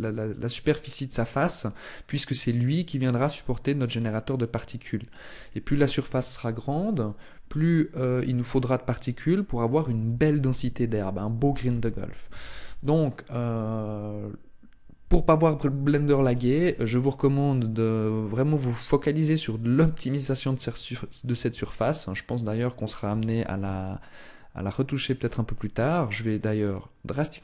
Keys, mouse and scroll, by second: 21.3 Tab, 22.8 g, 26.4 click.